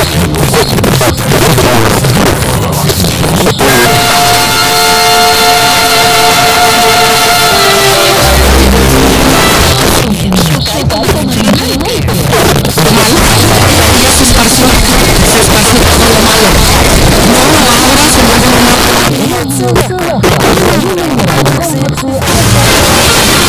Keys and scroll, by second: 9.8 Page_Down, 12.2 typing, 18.7 Page_Down, 21.8 typing.